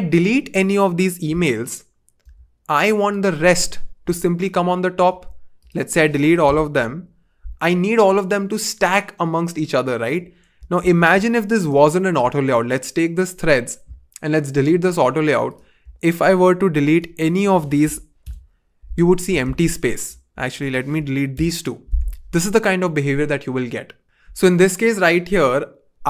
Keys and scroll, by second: 2.2 BackSpace, 6.7 BackSpace, 10.7 super+z, 18.2 BackSpace, 19.4 super+z, 21.3 BackSpace.